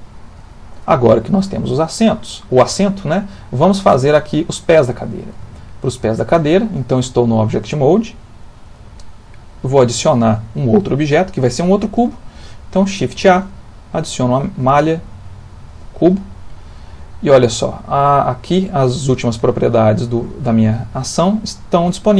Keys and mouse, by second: 0.0 shift+middle click, 0.1 shift+middle click, 2.9 middle click, 3.5 shift+middle click, 5.0 ctrl+middle click, 5.4 shift+middle click, 13.2 shift+a.